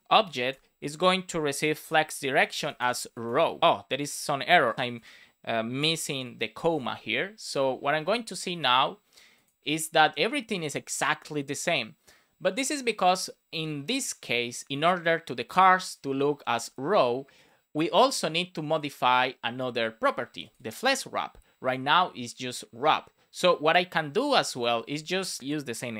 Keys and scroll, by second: 0.1 shift+[, 0.5 space, 2.2 shift+;, 2.4 space, 2.6 shift+1, 4.9 Down, 6.5 super+s, 24.7 super+c.